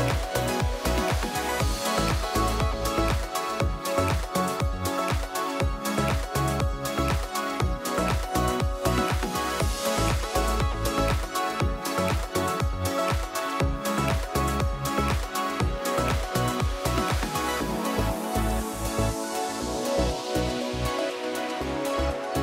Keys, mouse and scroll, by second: 0.2 ctrl+shift+c, 0.9 ctrl+d, 3.5 click, 4.9 click, 6.3 click, 7.0 F1, 7.6 click, 7.9 click, 9.4 click, 9.8 click, 10.3 click, 11.7 click, 12.8 click, 14.0 ctrl+shift+c, 14.6 F2, 15.7 click, 17.1 click, 17.6 middle click, 17.9 middle click, 18.4 =, 18.5 =, 18.7 scroll, 19.2 =, 20.5 click, 20.6 click, 21.3 click, 21.8 click, 21.9 click.